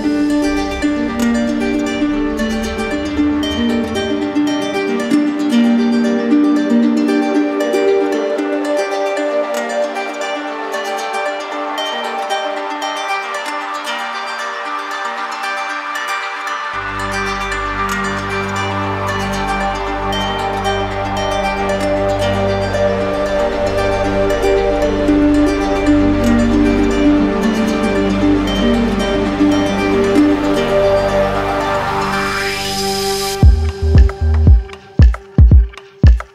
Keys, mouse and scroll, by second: 3.4 click, 6.3 click, 7.3 alt+click, 8.0 click, 8.5 click, 9.1 alt+click, 9.9 alt+click, 10.9 click, 12.6 click, 13.5 ctrl+click, 14.8 ctrl+click, 19.1 click, 20.0 ctrl+click, 21.3 ctrl+click, 21.9 ctrl+click, 25.2 click, 26.1 ctrl+click, 27.4 ctrl+click, 28.1 ctrl+click, 30.7 click, 31.4 ctrl+click, 32.5 ctrl+click, 33.3 ctrl+click, 35.7 click.